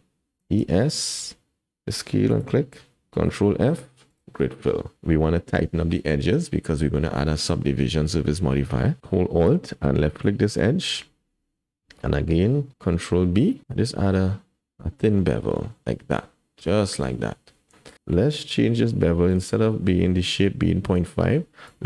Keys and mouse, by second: 0.4 e, 3.3 ctrl+f, 11.7 click, 12.9 ctrl+b, 16.8 middle click, 19.3 click, 21.7-21.8 drag.